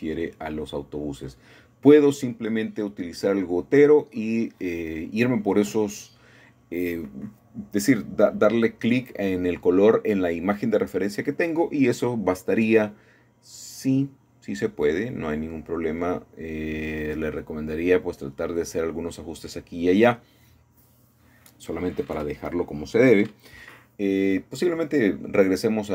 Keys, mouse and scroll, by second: 1.1-2.2 drag, 3.3 middle click, 4.6-6.4 shift+middle drag, 6.7-7.9 drag, 8.1-9.3 drag, 9.7-12.7 drag, 14.1-16.3 drag, 17.1-18.3 scroll down 1, 18.4-19.2 scroll up 1, 19.2 scroll up 1, 20.8-21.9 shift+middle drag, 21.9-22.4 scroll up 1, 22.4 shift+middle click, 23.5 shift+middle click, 24.4 shift+middle click, 25.1 shift+middle click.